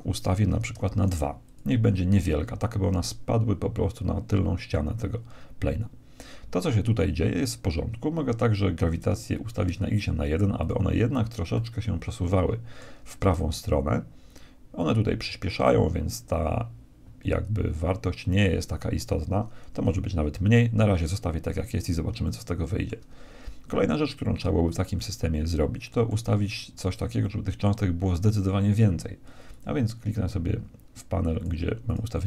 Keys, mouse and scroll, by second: 9.2-11.0 drag, 11.5-13.4 middle drag, 22.2-24.2 middle drag, 24.9-29.1 middle drag, 29.6-31.2 drag, 31.4-32.2 drag.